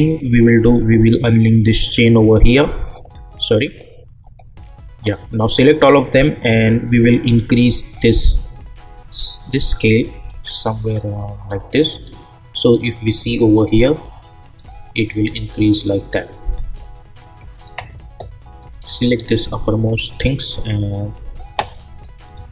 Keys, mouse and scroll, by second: 6.9-11.4 drag, 11.4-12.1 scroll down 1, 14.5-17.5 drag, 19.2-21.9 shift+drag.